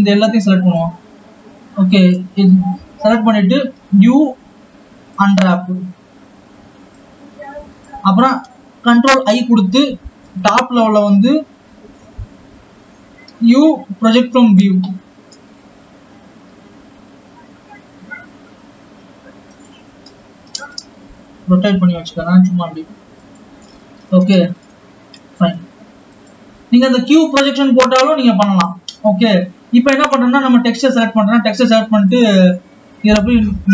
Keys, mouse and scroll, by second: 26.1 click, 27.9 click, 28.9-30.6 scroll up 1, 30.6 click.